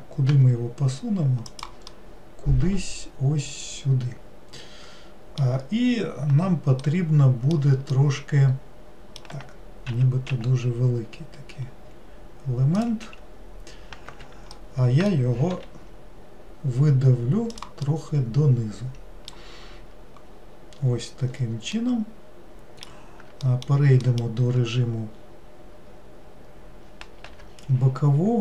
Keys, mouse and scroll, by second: 0.3 g, 1.9-5.0 middle drag, 6.9-9.9 middle drag, 9.9 s, 14.6-15.6 middle drag, 15.6 e, 17.9-20.3 middle drag, 20.3-21.8 scroll up 3, 21.8-23.5 middle drag, 24.1 alt+middle click, 25.2 scroll down 2, 27.3 g.